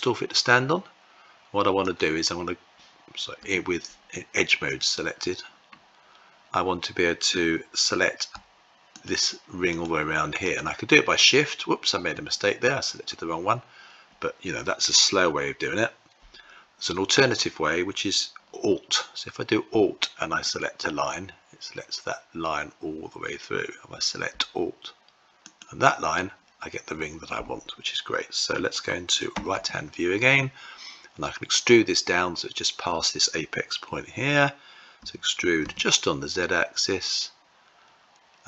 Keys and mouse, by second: 1.6 click, 3.1 2, 4.4 click, 34.7 e.